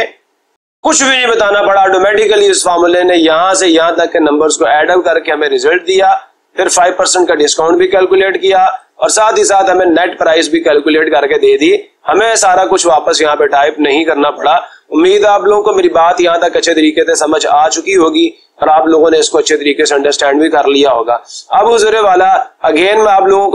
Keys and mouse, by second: 0.8-2.1 drag, 4.6-6.8 drag, 6.9-7.9 drag, 8.6-9.7 drag.